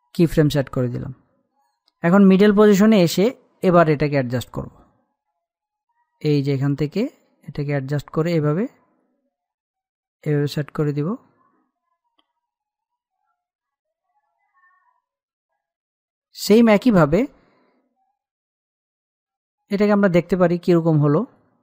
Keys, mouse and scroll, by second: 4.5-5.0 scroll up 1, 6.0-13.7 drag, 13.7-18.5 drag, 18.5-19.1 scroll down 1, 21.0 scroll up 1.